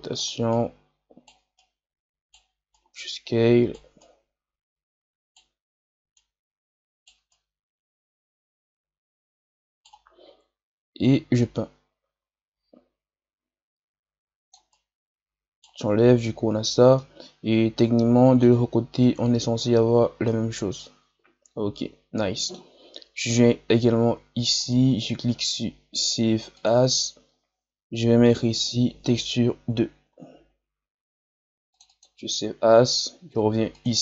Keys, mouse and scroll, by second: 1.6-11.5 right drag, 11.5-14.4 drag, 14.6-16.5 right drag, 16.5-16.9 scroll down 2, 16.9-18.9 middle drag, 18.9-19.3 scroll up 4, 20.1 scroll down 1, 20.7-26.9 middle drag, 26.9-32.2 drag.